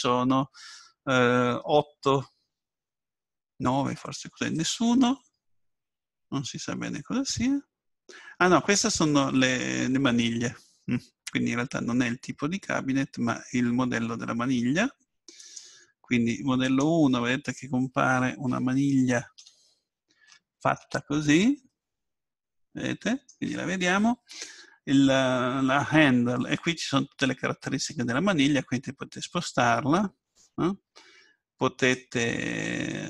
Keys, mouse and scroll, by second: 15.4-17.7 drag, 17.7-22.7 middle drag, 27.2-29.0 drag, 32.2-33.0 drag.